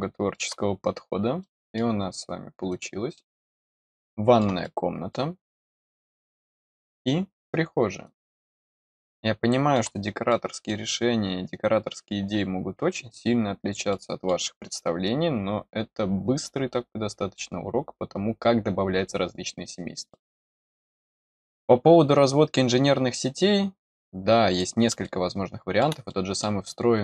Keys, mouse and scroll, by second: 0.9 scroll up 1, 1.3 middle click, 2.6 click, 3.1-4.3 middle drag, 4.6 middle click, 6.5 middle click, 8.0 click, 8.8 middle click, 10.2 middle click, 13.8 middle click, 20.0 middle click, 24.4 click, 25.0 middle click, 26.0 middle click.